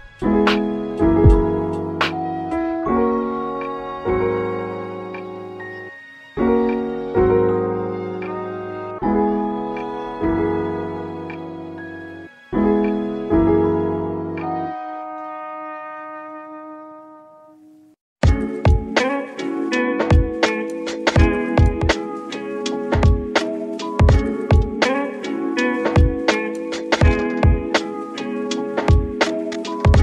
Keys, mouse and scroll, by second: 1.5 KP_7, 2.4 scroll up 2, 3.1 shift+middle click, 4.1 Tab, 5.0 click, 5.6 r, 8.4 click, 8.7 r, 10.1 e, 12.0 click, 12.5 e, 15.1 a, 16.3-19.2 right drag, 19.2 click, 19.8 r, 21.5 drag, 22.2 r, 23.9 click, 24.6 r, 26.0 click, 26.6 r, 27.5 click, 28.0 r, 29.7 s.